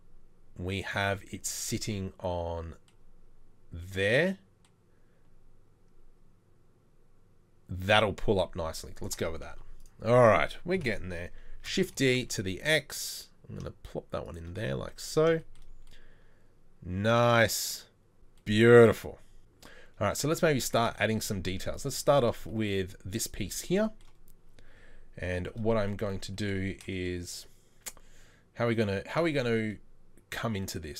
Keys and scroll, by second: 9.5 Delete, 10.8 KP_7, 11.6 shift+d, 20.6 Tab, 21.5 Tab, 21.9 Tab.